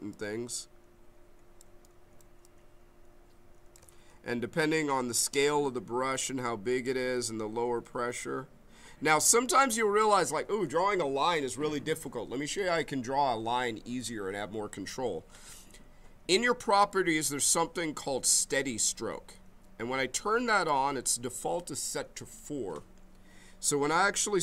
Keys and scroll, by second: 4.0 ctrl+z, 6.1 b, 7.1 m.